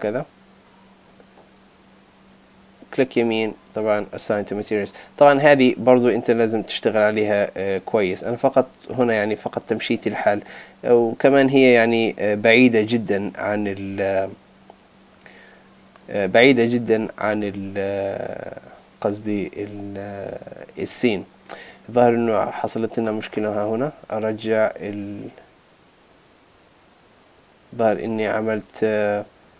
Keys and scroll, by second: 23.9 super+z, 28.4 super+z.